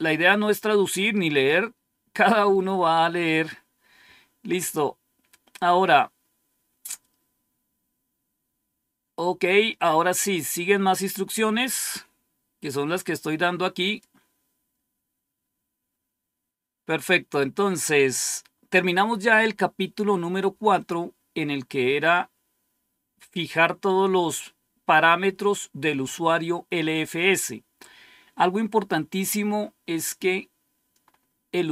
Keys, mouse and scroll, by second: 3.2-3.7 scroll up 2, 3.7-4.7 scroll up 1, 4.7-5.4 scroll down 2, 13.7 click, 29.8-30.2 scroll down 1, 31.0-31.6 scroll up 1.